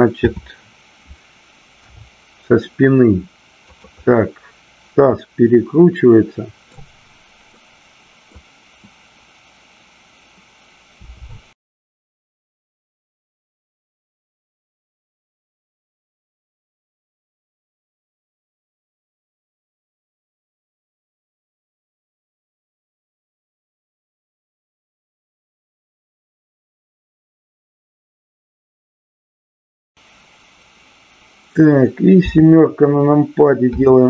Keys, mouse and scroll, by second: 0.3 KP_7, 1.7 r, 3.7 click, 4.0-6.6 middle drag, 7.5 middle click, 10.9 r, 13.9 drag, 14.3-15.2 middle drag, 17.4 shift+middle click, 22.5-23.2 shift+middle drag, 23.4-25.5 middle drag, 26.9-28.3 middle drag, 29.3 click, 32.1 KP_7, 33.7 r.